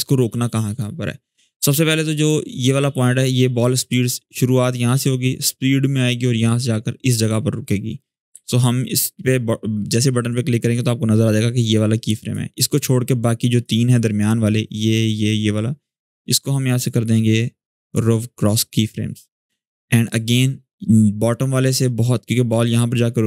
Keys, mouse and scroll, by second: 8.1 click, 8.1 v, 8.3 click, 11.6 click, 11.7-12.3 drag, 16.4 right click, 17.6 click, 18.3 shift+scroll down 1, 19.2-19.8 click, 20.0 shift+scroll down 1.